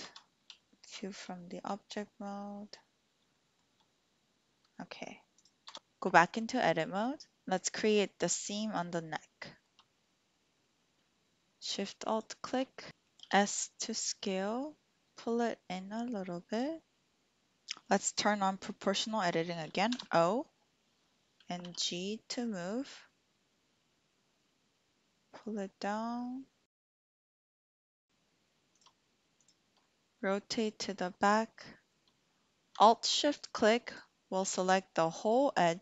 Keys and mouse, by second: 0.0 Tab, 0.6 shift+click, 1.3 shift+click, 3.3 shift+click, 5.6 Tab, 7.3 click, 9.4 shift+click, 10.3 click, 12.2 alt+shift+click, 13.3 s, 16.5 click, 17.5 Escape, 19.9 o, 21.6 g, 28.0 click, 28.7 shift+click, 29.8 click, 30.4 shift+click, 31.7 shift+click, 33.5 alt+shift+click.